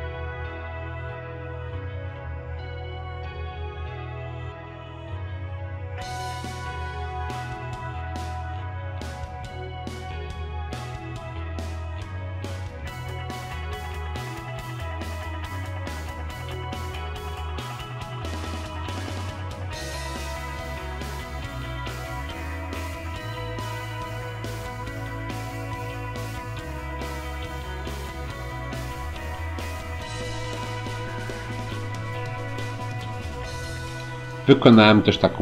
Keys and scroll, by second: 13.0 ctrl+c, 16.3 ctrl+v.